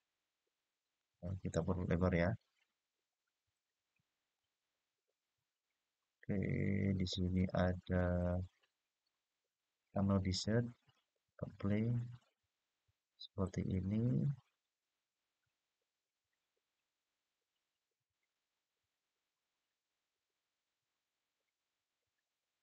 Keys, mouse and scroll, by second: 1.2 click, 4.1-7.1 drag, 8.1 click, 10.6 click, 13.2-18.1 middle drag, 19.1-21.9 scroll down 2, 22.4 click.